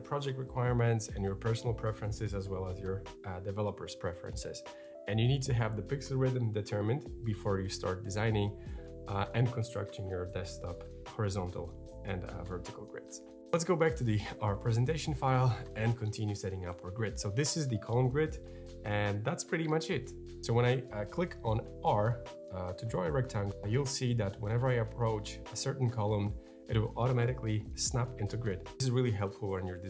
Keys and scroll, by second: 20.2 r.